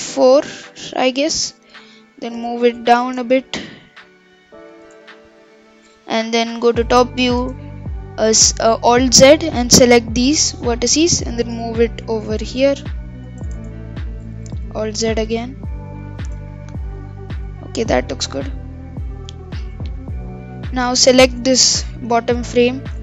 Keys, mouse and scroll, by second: 2.7 g, 6.5 KP_7, 6.8-7.4 scroll down 4, 7.4 Tab, 9.2 alt+z, 9.6 click, 11.0 g, 13.6 Tab, 13.8-14.5 middle drag, 14.5 alt+z, 14.9-15.3 scroll up 2, 15.3-15.7 middle drag, 15.7-16.0 scroll up 1, 16.0 click, 16.4-18.3 middle drag, 18.3-19.7 scroll down 1, 19.7 click, 20.6 click, 21.7 KP_1, 22.4 scroll up 4.